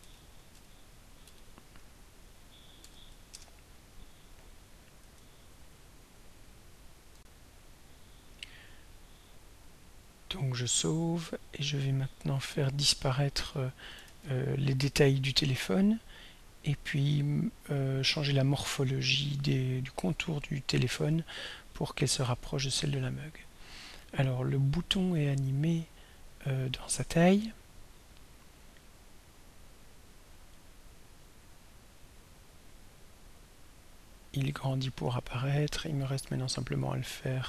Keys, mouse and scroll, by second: 0.2 ctrl+a, 0.6 ctrl+0, 1.3 ,, 2.8 6, 3.3 Return, 7.2 r, 10.8 ctrl+s, 13.5 click, 14.0 ctrl+s, 16.7 click, 18.9 click, 23.5 click, 27.8-37.4 drag.